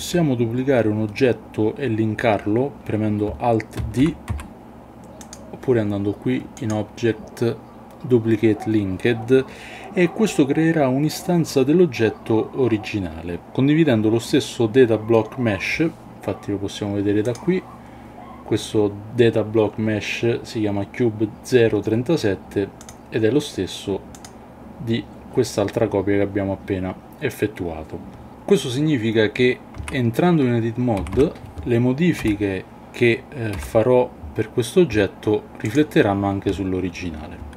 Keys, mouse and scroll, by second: 3.9 alt+d, 4.3 x, 5.3 click, 6.6-9.0 drag, 17.2 click, 24.1 click, 29.8 Tab, 31.0 a, 31.1 a, 32.2 l, 33.5 g, 35.7 click.